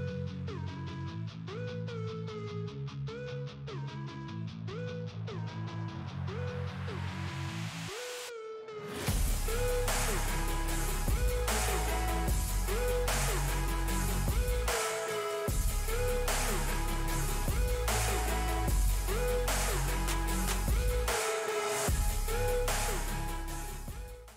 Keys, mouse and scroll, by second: 7.2 ctrl+x, 8.4-10.2 drag, 10.2 Delete, 11.9 ctrl+g, 12.3 p, 14.9-19.4 drag, 19.4 click.